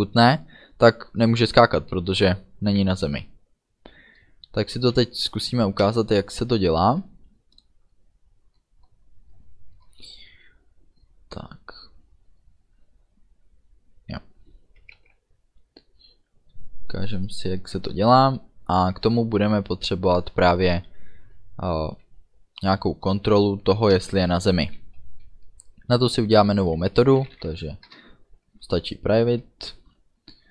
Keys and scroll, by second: 24.0 Return, 27.2 p, 27.4 i, 28.0 Return, 28.7 space.